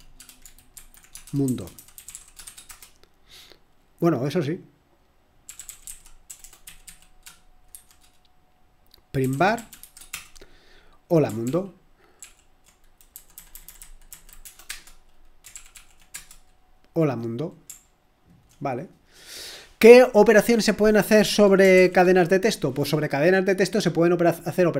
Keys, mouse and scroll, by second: 0.0-2.9 typing, 5.3-7.7 typing, 8.9-10.3 typing, 11.4 ctrl+p, 12.2 ctrl+p, 13.1 Left, 13.3 Left, 13.5 Left, 13.6 Left, 14.4 BackSpace, 14.6 Return, 15.5 ctrl+p, 15.7 ctrl+p, 16.1 Return, 21.7 ctrl+l.